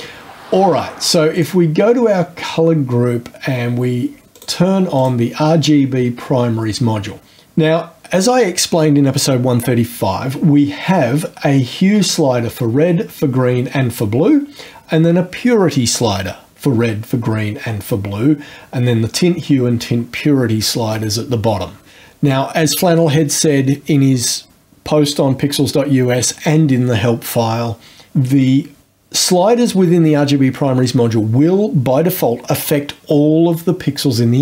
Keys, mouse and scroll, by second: 1.4 click, 4.4 click, 5.0 click, 7.3 scroll down 2.